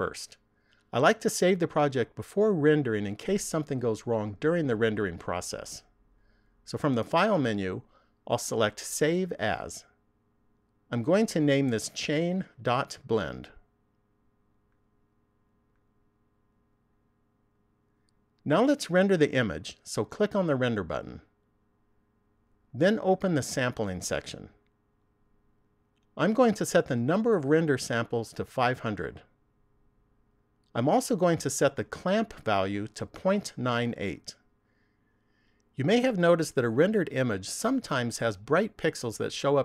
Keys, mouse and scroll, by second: 8.6 click, 16.0 click, 21.2 click, 23.3 click, 26.2 click, 29.4 click, 30.1 KP_0, 31.9 click.